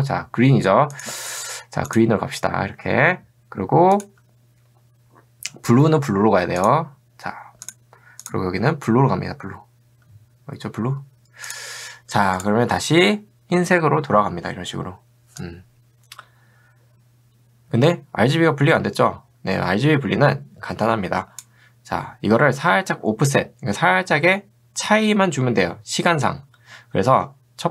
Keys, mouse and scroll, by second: 1.0 click, 1.9 click, 4.0 click, 6.6 click, 12.4 click, 15.5-21.5 drag.